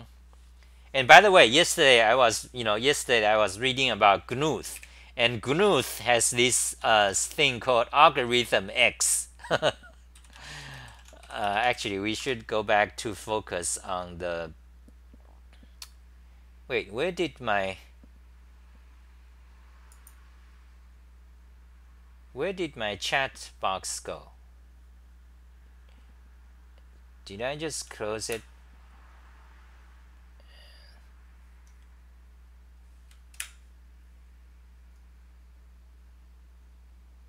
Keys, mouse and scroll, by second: 31.2-31.9 typing, 33.3 t.